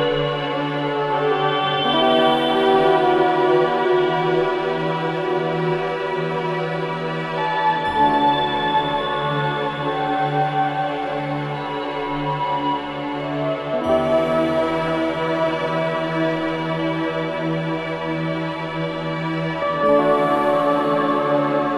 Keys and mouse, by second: 0.5 alt+click, 2.3 click, 5.8-8.3 drag, 9.0 click, 10.0 click, 11.4 click, 15.1 click, 16.3-19.0 typing, 19.2 Return, 20.6 click, 21.0 shift+click.